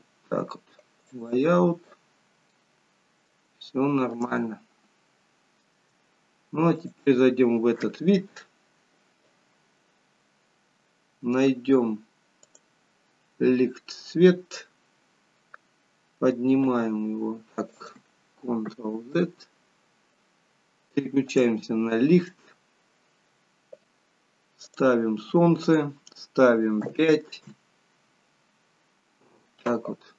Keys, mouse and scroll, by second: 1.3 click, 2.5 middle click, 3.6 shift+middle click, 4.3 middle click, 8.2 click, 9.9-10.7 scroll up 10, 12.6 click, 14.2-14.5 scroll down 1, 15.4-16.7 scroll down 1, 16.7 g, 19.4 ctrl+z, 21.3 click, 24.7 click.